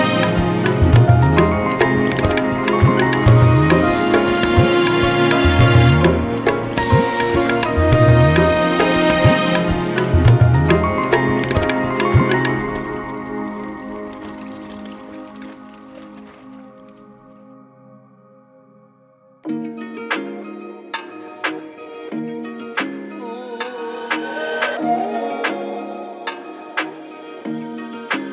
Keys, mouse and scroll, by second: 0.0 middle drag, 0.3 z, 0.6 click, 1.0 click, 1.5 middle drag, 1.8-2.1 shift+drag, 2.4-4.3 shift+drag, 4.5-5.7 shift+drag, 5.7 r, 6.4-7.2 middle drag, 7.8 click, 8.1 KP_7, 8.4 Tab, 8.7 click, 9.5 click, 10.2 shift+d, 11.5 shift+d, 12.5 Tab, 13.4 Tab, 13.9 g, 15.1 click, 15.3 g, 16.3 click, 16.6 n, 17.1 click, 18.0 click, 19.1 click, 19.9 ctrl+shift+Left, 20.8 Tab, 21.2 drag, 22.2 ctrl+click, 23.4-24.1 scroll up 4, 24.1-24.8 right drag, 25.2 ctrl+j, 25.3 scroll down 1, 25.4-26.2 middle drag, 28.0 click, 28.2 Tab.